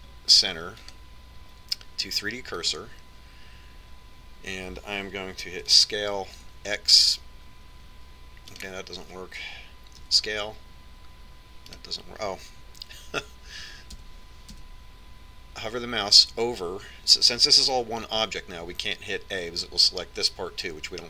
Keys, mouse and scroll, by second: 2.2-4.0 drag, 7.1 s, 11.5 s, 15.0 a, 15.4 a, 16.0 a, 20.2 a.